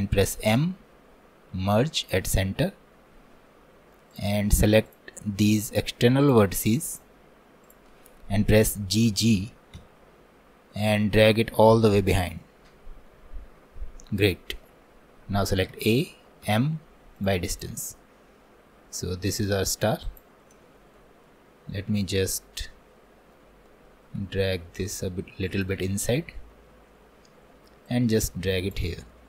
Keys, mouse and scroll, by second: 0.5 m, 2.7-4.2 middle drag, 4.2-8.0 drag, 8.1-9.4 middle drag, 9.4 g, 15.5-19.7 middle drag, 19.7-20.1 scroll up 1, 20.1 click, 20.7-24.2 alt+middle drag, 24.2 g, 29.1 alt+middle click.